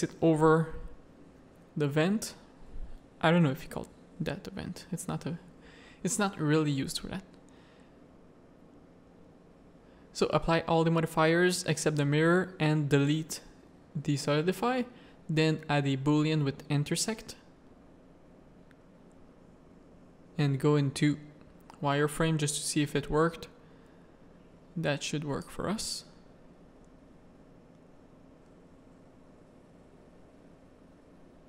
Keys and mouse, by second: 1.3 middle click, 2.6-3.8 drag, 3.9 click, 4.3 middle click, 4.9 click, 5.2 middle click, 6.7 middle click, 8.5 click, 9.0 middle click, 9.8 ctrl+a, 10.3 ctrl+a, 11.1 ctrl+a, 12.7-13.8 drag, 14.9 click, 15.9 click, 19.3 middle click, 19.9 z, 20.4-21.8 middle drag, 21.9 shift+middle click, 22.8 middle click, 24.5 middle click, 25.4 g.